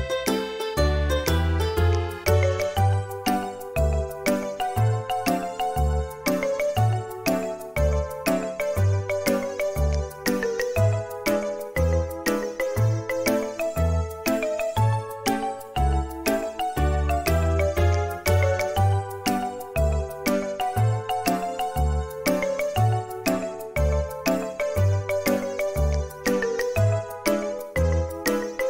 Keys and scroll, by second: 0.1 space, 0.9 Escape, 5.9 space, 12.5 ,, 13.1 m, 19.1 space, 21.0 Escape.